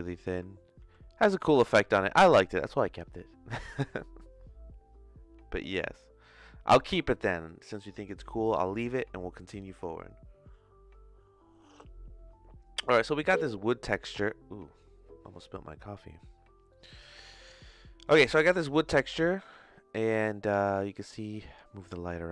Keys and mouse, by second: 0.8 ctrl+z, 1.4 ctrl+s, 9.7 click, 16.7 middle click, 17.8 middle click, 18.9-21.5 drag.